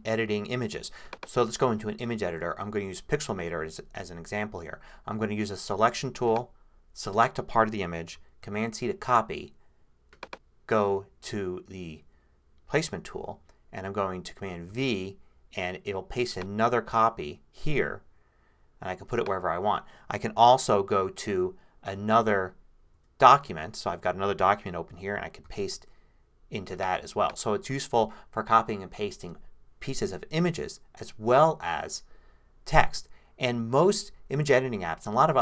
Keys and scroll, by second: 8.4 super+c, 14.7 super+v, 22.9 super+`, 25.4 super+v.